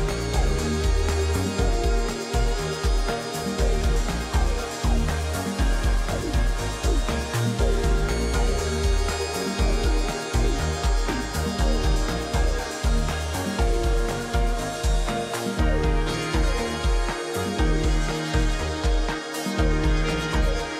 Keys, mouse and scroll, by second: 16.7 double click, 17.1 double click.